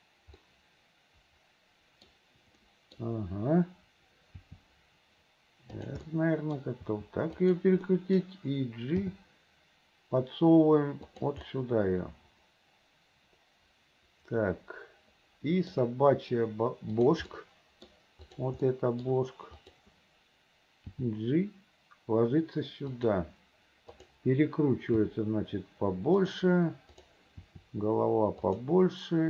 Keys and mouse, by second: 0.6-2.0 drag, 2.8 click, 4.5 r, 6.3 click, 6.9 r, 8.2 middle click, 9.2 g, 11.6-15.8 middle drag, 17.0 click, 17.5 middle click, 18.7 middle click, 21.0 g, 25.1 r, 27.1 click, 27.5 r.